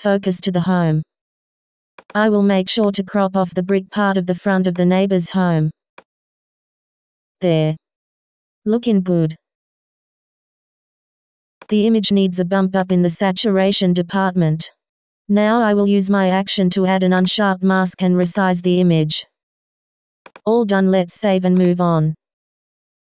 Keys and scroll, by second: 22.1 Return.